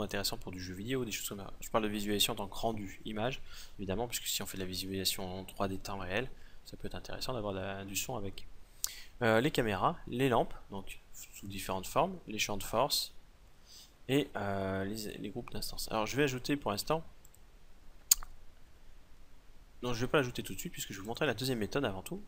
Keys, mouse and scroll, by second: 17.2-19.1 drag.